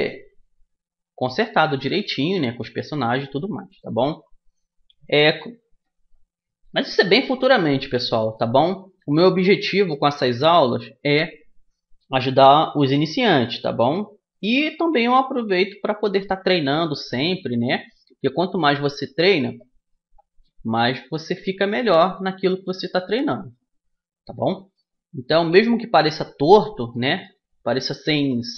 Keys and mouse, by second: 2.0-9.4 middle drag, 9.4 right click, 10.0-11.3 drag, 11.3-15.6 middle drag, 15.6-17.4 right drag, 17.4-19.2 middle drag, 23.2-27.0 right drag, 25.2 click, 27.0-28.2 middle drag, 28.2 right click.